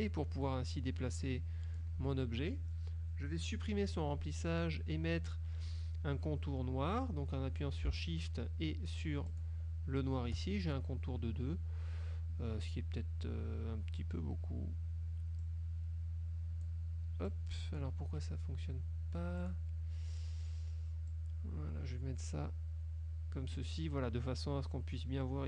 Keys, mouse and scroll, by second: 4.0 click, 9.4 shift+click, 15.5-16.9 drag, 17.4 click, 19.5 click, 21.2-23.8 drag.